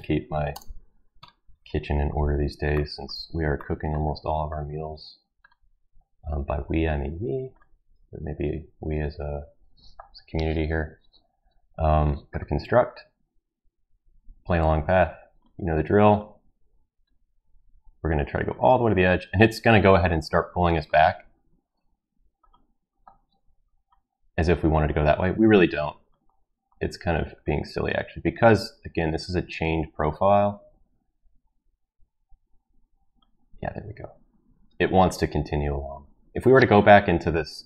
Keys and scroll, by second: 0.5 Return.